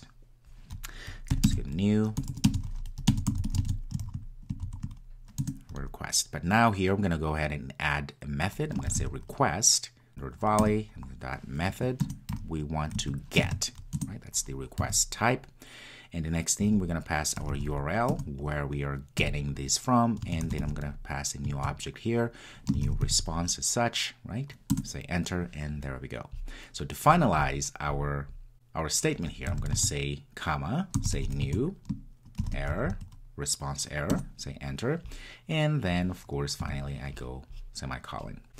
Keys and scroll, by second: 5.5 Return, 10.1 Return, 18.1 Return, 24.8 Return, 25.0 Return, 34.3 Return.